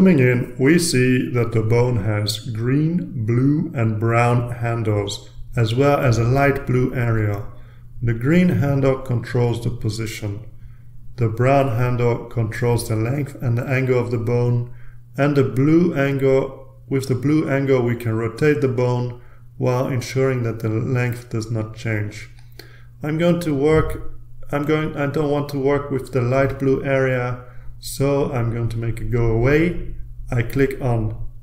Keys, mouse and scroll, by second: 0.8-1.7 ctrl+scroll up 1, 1.7-6.1 ctrl+middle drag, 9.5-10.8 drag, 11.5 click, 12.6-15.4 drag, 15.8-19.4 drag, 20.1-21.9 drag.